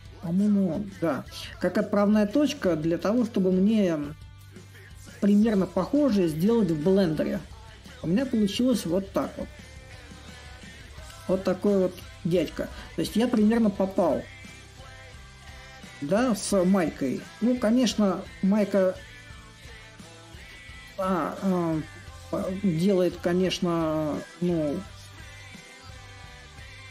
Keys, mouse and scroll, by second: 0.0-26.9 middle drag.